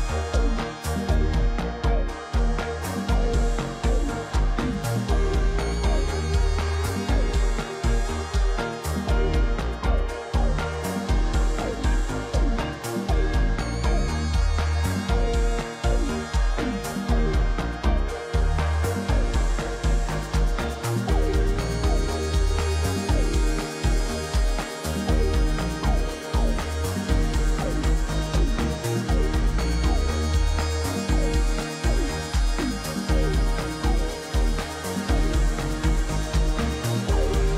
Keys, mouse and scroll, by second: 11.5 right click, 21.9 click, 31.3 shift+click, 32.5 ctrl+t, 33.4 shift+click.